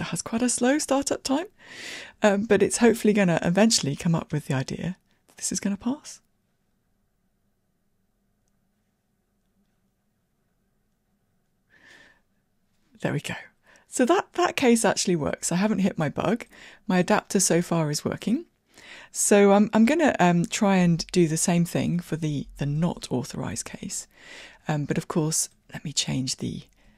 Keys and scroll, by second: 21.0 super+c, 22.9 super+v.